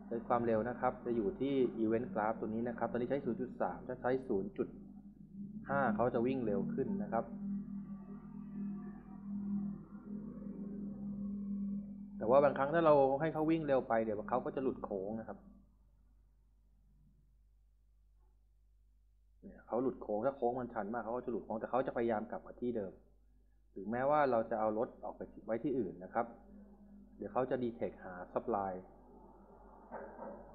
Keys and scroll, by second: 5.2 ., 5.5 5, 5.6 Return, 11.8 w, 12.6 s, 19.0-19.9 typing.